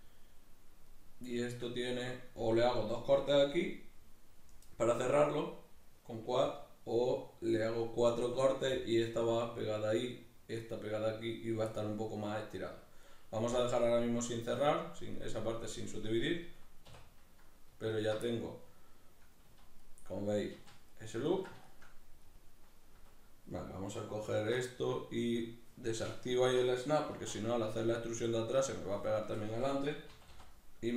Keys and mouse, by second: 16.8 \, 17.9 alt+right click, 18.2-23.3 middle drag, 19.4 z, 20.6 z, 23.3 right click, 24.1 alt+right click, 24.4-30.9 middle drag, 26.1 shift+Tab, 26.9 alt+q, 29.9 e.